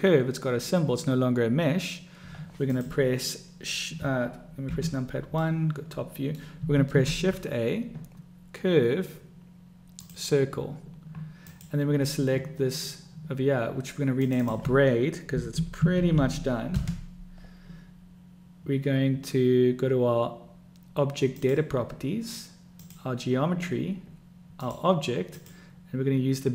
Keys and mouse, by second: 2.9 click, 4.9 KP_1, 5.7-6.7 drag, 5.9-6.7 middle drag, 7.2 shift+a, 11.7 click, 14.7-18.1 drag, 23.1 click, 24.8 click, 25.6-26.5 drag.